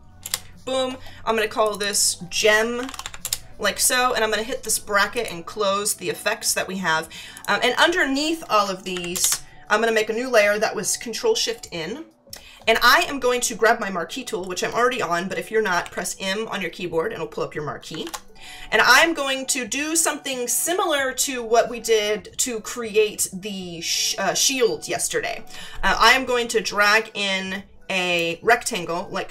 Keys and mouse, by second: 0.2 Return, 1.6 click, 2.5-3.5 typing, 5.1 click, 7.3 click, 8.9 ctrl+shift+n, 9.1 ctrl+shift+Return, 15.8 m, 26.0 click.